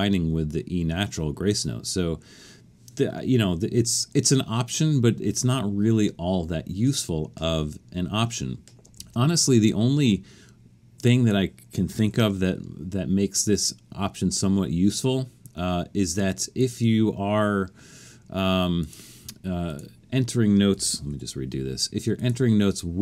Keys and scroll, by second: 8.9 alt+super+a, 11.7-12.6 typing, 20.7 super+a, 21.1 4.